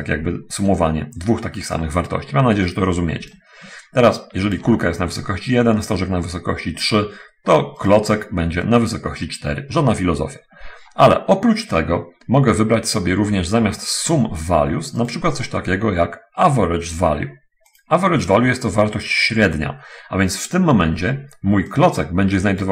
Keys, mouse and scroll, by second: 3.0 right click, 3.7-5.0 ctrl+drag, 8.3 right click, 15.3 click, 22.1-22.7 drag.